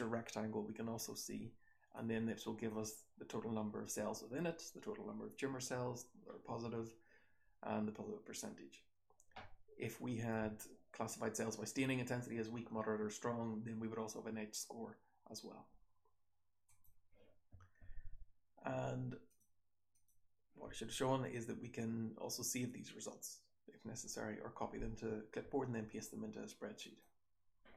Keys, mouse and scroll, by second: 19.2 click.